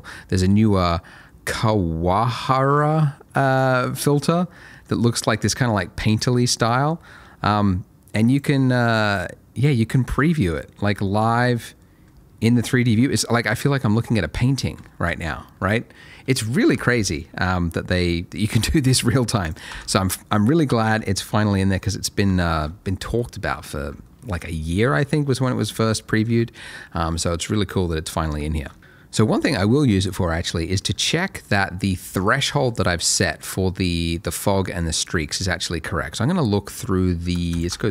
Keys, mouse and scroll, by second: 0.3-3.6 scroll up 2, 0.6 middle click, 3.7 shift+middle click, 4.1 shift+scroll up 1, 5.6 scroll down 1, 5.7 middle click, 6.6 click, 10.0 middle click, 10.3-10.7 scroll down 1, 11.0 shift+middle click, 11.5 middle click, 11.7 scroll up 1, 13.2 middle click, 13.6 scroll up 1, 14.3 middle click, 15.1 shift+scroll down 2, 17.3 middle click, 19.4 click, 19.7 ctrl+x, 20.6 middle click, 21.0 shift+middle click, 21.3 shift+scroll up 2, 22.2 scroll up 1, 22.3 shift+middle click, 24.0 middle click, 24.6 shift+middle click, 24.8 shift+scroll up 1, 25.6 middle click, 26.4 shift+middle click, 26.6 scroll down 1, 27.1 middle click, 28.4 shift+middle click, 29.7 middle click, 30.0 scroll up 1, 30.5 middle click, 34.9 scroll up 1, 35.2 middle click, 37.6 ctrl+shift+click.